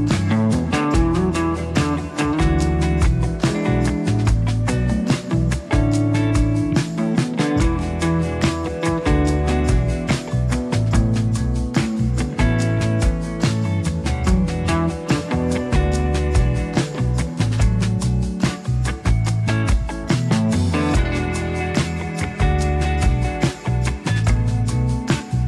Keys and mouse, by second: 0.1-1.5 drag, 1.8 click, 2.9 shift+click, 3.2 shift+click, 3.9 shift+click, 4.7 shift+click, 5.0 shift+click, 5.7 click, 6.6 1, 6.8 f, 7.3 click, 8.0 click, 8.9 g, 10.4 middle click, 11.0 ctrl+z, 11.0 ctrl+click, 11.6 f, 12.0 ctrl+click, 12.3-13.9 ctrl+drag, 14.1 ctrl+click, 14.5 ctrl+click, 14.7 ctrl+click, 15.2 click, 16.2 ctrl+click, 16.6 ctrl+z, 16.8 2, 17.1 click, 17.8 click, 18.4 ctrl+click, 18.7 click, 18.8 f, 22.3 click, 23.0 click, 23.5 click, 24.0 middle click, 24.5 click.